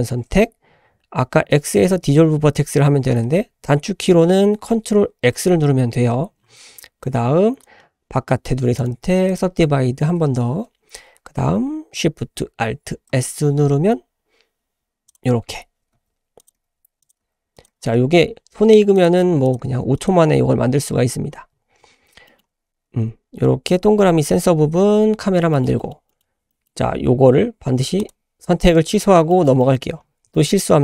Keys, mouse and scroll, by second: 1.6 x, 5.3 ctrl+x, 6.4-7.0 scroll down 1, 7.0-7.6 drag, 7.0-7.6 scroll down 1, 8.8 right click, 9.8 scroll up 2, 13.1 alt+shift+s, 15.9-17.7 typing, 19.1 s, 19.6 g, 20.8-21.8 scroll down 4, 22.3 shift+middle drag, 23.2 Tab, 23.8 Tab, 25.0-25.3 scroll down 3, 25.5 shift+middle click, 25.8 shift+middle click, 26.1 shift+middle click, 26.5 shift+middle click, 28.0 click, 29.3 shift+middle click, 29.6 shift+s, 30.0 scroll up 1, 30.3 shift+middle click.